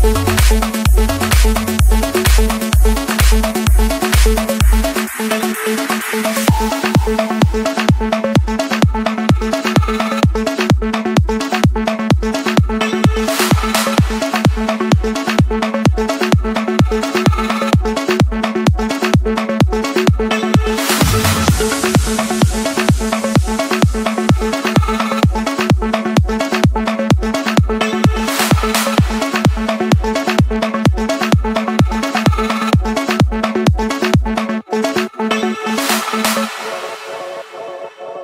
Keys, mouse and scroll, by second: 1.8 click, 1.9 middle click, 1.9 middle click, 2.9 middle click, 3.8 click, 4.8 click, 5.3 click, 6.2 click, 7.0 right click, 8.6 click, 10.5 scroll down 1, 11.1-11.5 scroll up 1, 11.5 Escape, 12.8 Return, 14.7 click, 16.4 click, 16.7 Escape, 17.1 click, 17.4 click, 18.8-19.6 typing, 20.6 Return, 22.7-23.8 typing, 24.4 Return, 25.4 click, 27.4 click, 27.9 click, 28.2 Escape, 30.0-31.1 drag, 32.6 Delete, 33.5-35.4 middle drag, 33.5 scroll, 34.2-35.3 scroll, 35.3 scroll, 36.0-37.0 typing, 38.1 Return.